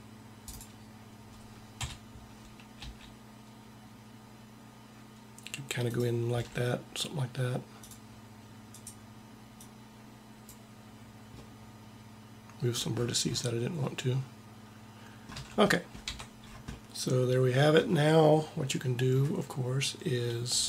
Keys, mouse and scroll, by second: 1.7 KP_1, 2.8 g, 6.2 a, 7.8-11.5 drag, 15.3 a, 16.0 Tab.